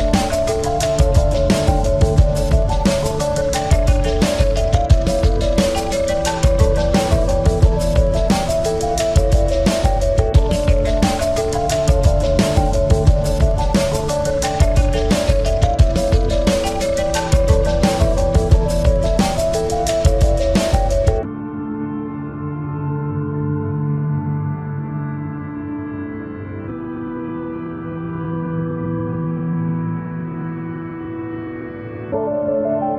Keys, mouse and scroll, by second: 7.4 ctrl+z, 7.8 ctrl+z, 8.8-10.5 drag, 11.2 s, 15.1-16.7 drag, 15.6 e, 16.8-18.6 drag, 17.4 s, 20.8-25.9 drag, 21.2 e, 22.6 s, 24.8 e, 25.9-27.8 drag, 26.3 s, 28.1-29.4 drag, 29.5 e, 30.6 click, 30.9 s, 32.6 click.